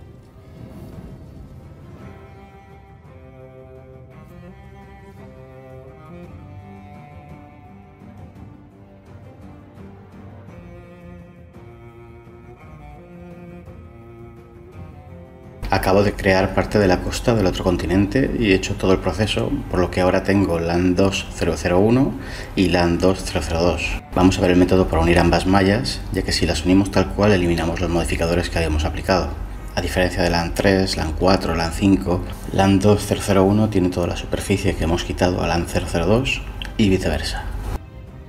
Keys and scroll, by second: 0.4 Escape, 10.2 shift+a, 10.3 Tab, 15.6-19.3 typing, 19.2 Tab, 21.3 g, 22.8 shift+d, 22.9 Escape, 25.2 shift+d, 25.3 Escape, 27.7 Tab, 34.4 Delete.